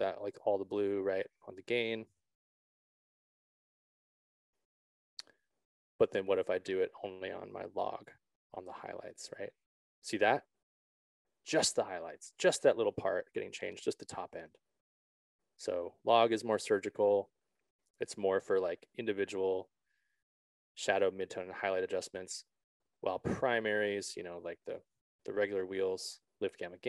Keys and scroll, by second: 2.9 Return.